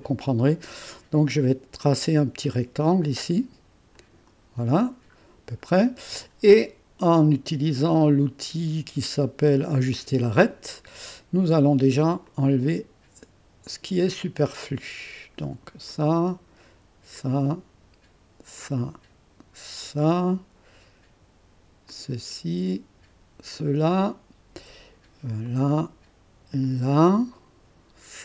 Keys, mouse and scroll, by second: 0.0 click, 1.8 click, 3.9 click, 5.2-5.8 scroll up 2, 9.9 click, 12.2 click, 13.6 click, 15.9 click, 17.1 click, 18.5 click, 19.8 click, 21.8 click, 22.6 click, 23.5 click, 25.4 click, 26.6 click.